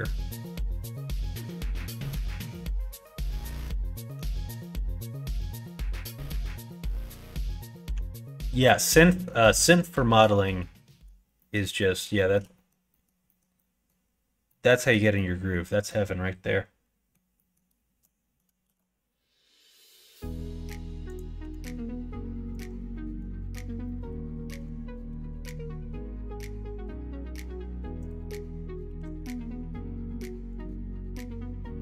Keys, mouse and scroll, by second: 6.9 click, 7.8 l, 8.2 middle click, 9.0 middle click, 9.5 middle click, 10.4 middle click, 10.8 middle click, 11.3 middle click, 11.8 middle click, 12.2 shift+middle click, 12.5 middle click, 12.8 middle click, 13.2 middle click, 13.4 middle click, 14.4 middle click, 15.2 middle click, 15.8-17.1 middle drag, 17.3 middle click, 18.0 middle click, 18.9 shift+d, 21.3 g, 22.7 ctrl+z, 22.8 ctrl+x, 23.7 middle click, 24.5 g, 28.2 middle click, 28.8 r, 30.7-31.8 middle drag.